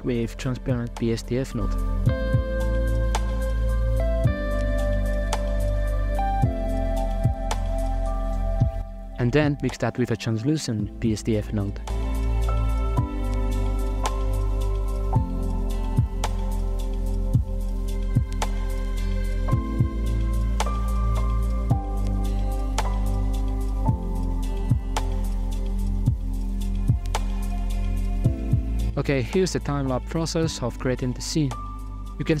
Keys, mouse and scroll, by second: 1.3-2.5 ctrl+shift+right drag, 2.5-4.9 drag, 6.4 ctrl+shift+click, 7.1-8.2 drag, 8.2 shift+a, 9.4-11.0 ctrl+shift+right drag, 11.0 middle click, 11.8-12.8 drag, 13.0 middle click, 13.3 g, 14.9 z, 15.0-16.2 middle drag, 16.2 scroll down 1, 16.2-17.4 middle drag, 17.4 scroll down 3, 17.6-19.5 middle drag, 20.6 a, 21.4 shift+right click, 22.0 ctrl+p, 23.7 middle click, 24.4 right click, 24.4 g, 25.3-26.7 middle drag, 27.5 shift+middle click, 27.7 z, 28.0-28.9 drag, 29.2 scroll down 2, 29.3 middle click, 29.7-30.1 drag, 30.2-30.6 scroll down 8, 30.6 right click, 30.7-32.4 typing, 31.2 click, 31.4 right click, 31.9 scroll up 2.